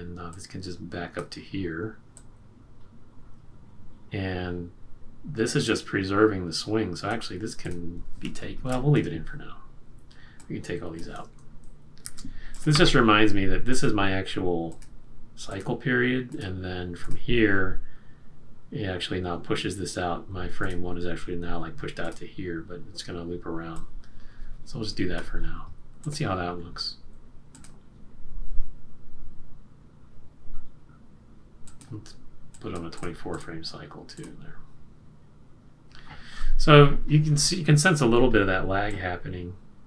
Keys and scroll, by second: 12.0 shift+F5.